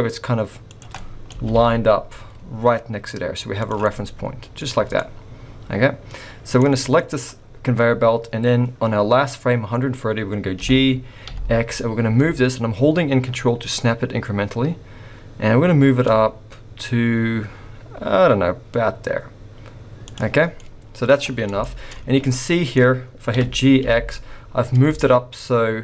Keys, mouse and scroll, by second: 1.0 middle click, 1.4 g, 3.8 middle click, 4.6-5.0 scroll up 2, 5.0 middle click, 6.9 click, 7.3-7.7 scroll down 3, 10.6 g, 20.4-20.8 scroll down 6, 20.5 middle click, 21.1-21.5 scroll up 8, 21.6 shift+middle click, 21.9 scroll up 2, 22.2 middle click, 23.3 g.